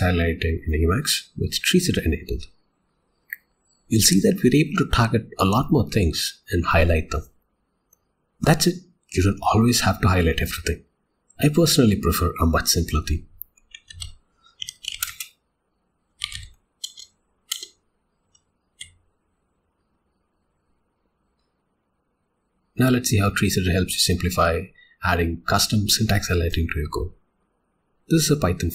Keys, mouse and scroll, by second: 13.9 alt+x, 15.9 space, 16.8 Return, 19.0 y, 21.6 click.